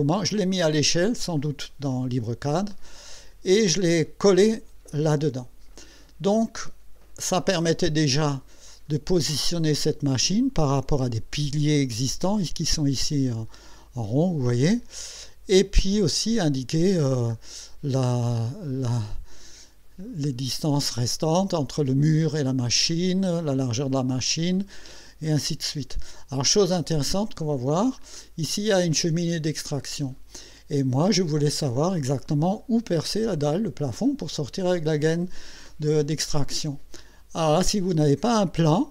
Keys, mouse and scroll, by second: 7.4 middle click, 8.3-8.7 scroll up 2, 9.5 scroll up 2, 13.6 scroll up 2, 15.5 scroll down 2, 16.5 middle click, 19.1-20.4 middle drag, 25.4 middle click, 27.0-28.1 middle drag, 30.6 middle click.